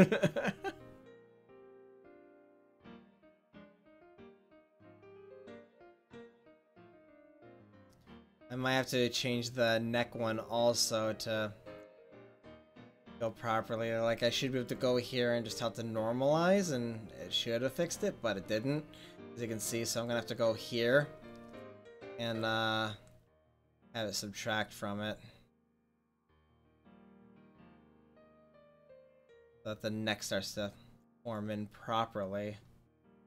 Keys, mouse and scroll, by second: 7.4 middle click, 9.7-12.1 drag, 12.1-12.9 middle drag, 15.1-17.0 drag, 17.0 middle click, 17.6 middle click, 20.7-21.7 right drag, 21.7 click, 25.7-29.5 drag, 29.6-30.3 middle drag, 31.1-32.2 drag.